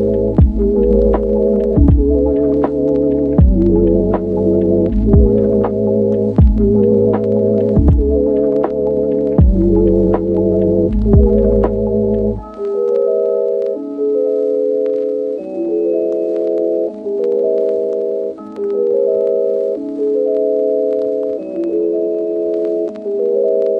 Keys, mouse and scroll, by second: 1.3 s, 2.1 click, 2.9 a, 3.2 g, 3.8 y, 6.4 s, 7.6 click, 12.5 click, 12.7 shift+right click, 14.0 e, 14.5 click, 14.9 click, 15.7 shift+middle click, 15.9 g, 16.0 z, 20.2 Tab, 20.8-22.6 middle drag, 22.5 Tab, 22.8 middle click, 23.2 click.